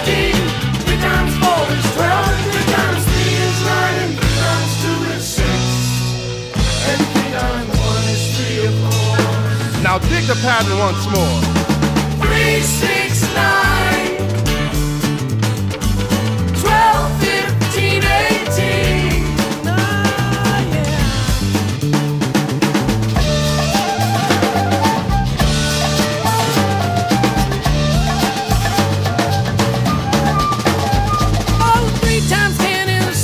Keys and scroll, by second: 14.9 shift+super+j, 22.6 shift+super+t, 29.9 shift+super+j.